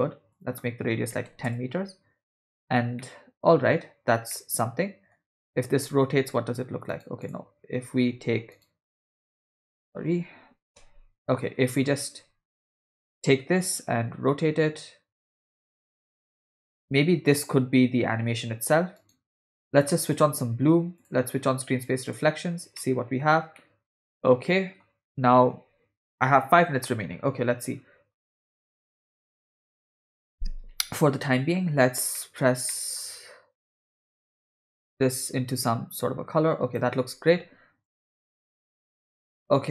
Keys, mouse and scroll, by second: 0.3-1.5 drag, 3.0 middle click, 4.3 middle click, 5.9 r, 7.2 click, 8.5-9.2 right drag, 9.3 click, 10.8 w, 11.6 e, 12.5 w, 12.9 click, 13.9 r, 20.1 click, 21.2 click, 22.2 click, 22.8-23.2 middle drag, 23.6-24.8 middle drag, 32.2 middle click, 32.7 middle click, 34.4 click, 38.0-38.4 shift+middle drag, 38.9 drag.